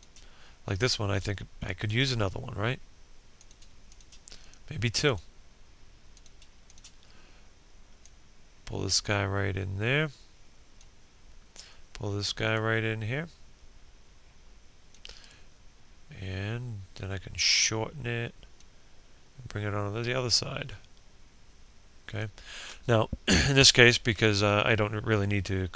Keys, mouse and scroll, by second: 1.1 shift+click, 3.8-25.7 shift+drag.